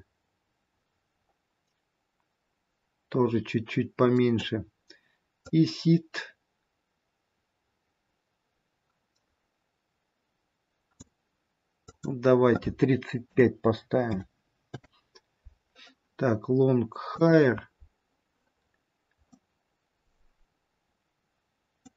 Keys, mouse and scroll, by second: 5.5 click, 11.8 click, 17.5 click, 18.8-19.4 scroll down 3, 19.4 middle click.